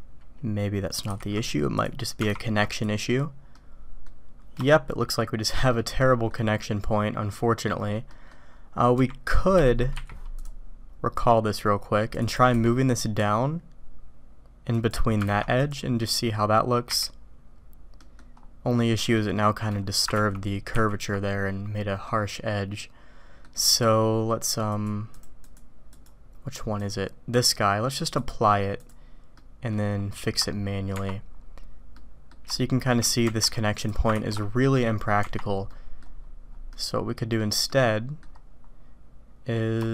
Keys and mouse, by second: 1.1 h, 1.7 click, 2.2 alt+v, 3.4 click, 3.9 middle click, 4.7-5.5 shift+middle drag, 5.8 middle click, 8.1 middle click, 9.0 g, 9.9 q, 12.4 g, 15.2 alt+v, 16.9 h, 17.9 click, 19.1 click, 22.1-23.4 drag, 24.7 click, 25.2 click, 25.9 click, 26.8 click, 27.4-29.0 drag, 29.3 middle click, 31.9 click, 32.5-32.9 shift+drag, 33.8 click, 34.1 ctrl+x, 34.6 click, 35.1 Tab, 36.7 click, 37.7 click, 39.8-39.9 shift+drag.